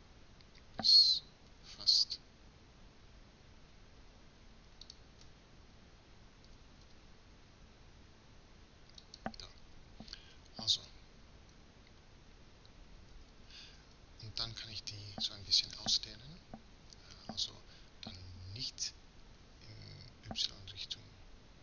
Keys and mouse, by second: 6.5 s, 11.6 a, 13.2 ctrl+z.